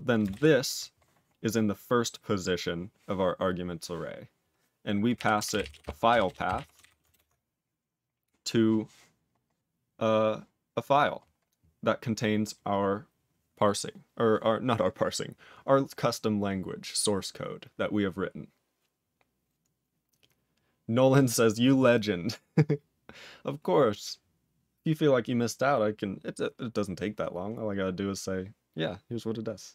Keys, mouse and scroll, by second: 0.2 space, 0.3 ctrl+y, 5.0-7.0 typing, 7.0 ctrl+BackSpace.